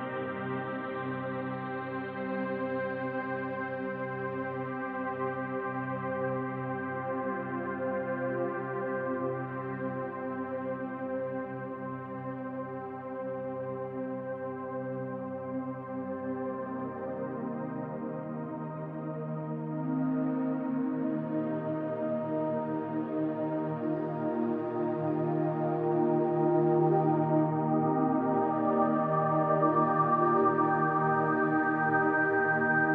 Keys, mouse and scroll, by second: 1.1 KP_1, 3.0 middle click, 3.0 shift+d, 3.4 click, 5.0 e, 6.3 click, 6.9 e, 7.7 click, 7.8 scroll down 1, 8.1-11.4 shift+middle drag, 8.3-8.6 scroll up 1, 8.6 ctrl+s, 9.0 scroll down 1, 9.4-10.2 scroll up 1, 10.2 e, 13.0 click, 13.2-15.3 shift+middle drag, 14.0 e, 15.3 click, 16.0 e, 16.7 click, 16.9-19.1 shift+middle drag, 17.6 e, 19.1 click, 19.6-20.0 scroll down 1, 20.0-21.8 middle drag, 21.8 click, 22.5 KP_1, 23.5 ctrl+click, 24.0 middle click, 24.7 ctrl+click, 25.6 KP_1, 26.9 e, 28.3 click, 29.4 g, 30.5 click, 31.2 g, 32.1 click, 32.2 middle click, 32.8 click.